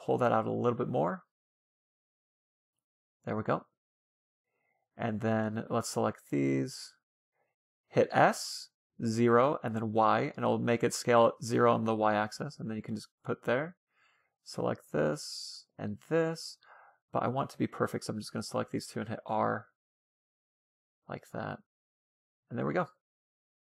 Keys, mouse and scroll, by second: 0.6-2.1 right drag, 0.6 g, 2.0 a, 2.5-4.7 middle drag, 4.1 a, 4.5 a, 4.7 c, 5.7 c, 6.3-7.8 right drag, 7.1 s, 11.4-12.8 drag, 13.1 a, 13.3 right click, 13.9 click, 15.5 right click, 16.2 ctrl+z, 16.7 click, 17.9 c, 18.3 right click, 19.5 r, 19.9 click, 21.7-23.3 drag, 23.2 a.